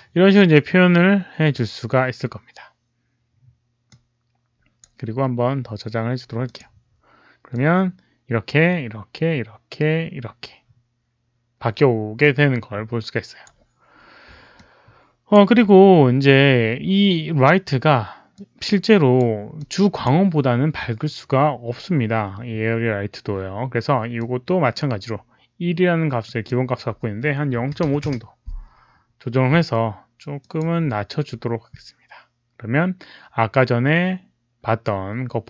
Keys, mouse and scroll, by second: 3.8 click, 6.4 click, 7.4-13.4 drag, 14.5 click, 18.3 click, 19.5 click, 24.1 click, 26.2 click, 27.5 KP_Decimal, 27.8 KP_5, 27.9 Return, 30.3 click.